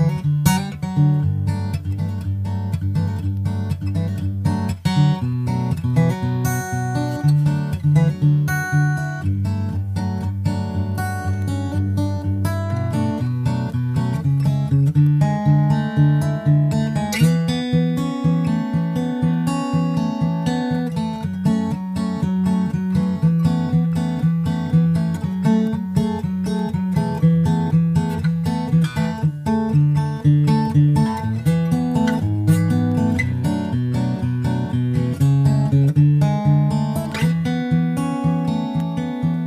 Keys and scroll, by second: 1.6 super+s, 9.7 super+c, 11.9 super+v, 11.9 super+s, 28.4 shift+super+Left, 29.0 super+s, 29.2 super+Tab, 30.1 super+Tab, 36.5 super+s, 36.7 super+Tab, 37.5 super+Tab.